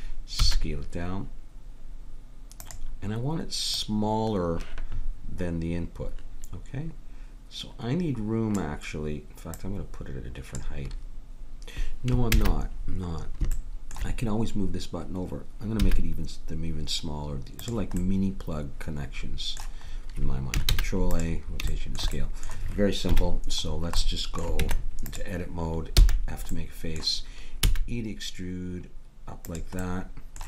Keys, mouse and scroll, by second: 0.4 s, 3.8-5.6 drag, 9.5-11.3 drag, 12.3 ctrl+z, 15.8 s, 18.0 middle click, 20.7 ctrl+a, 23.1 KP_Decimal, 24.6 Tab, 26.0 f, 27.6 e.